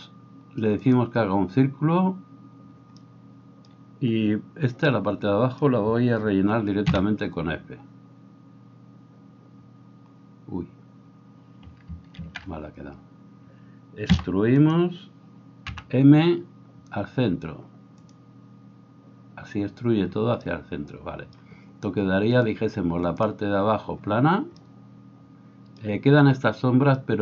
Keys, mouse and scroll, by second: 8.4 f, 12.9 ctrl+z, 15.2 e, 15.7 m, 22.4-27.2 drag.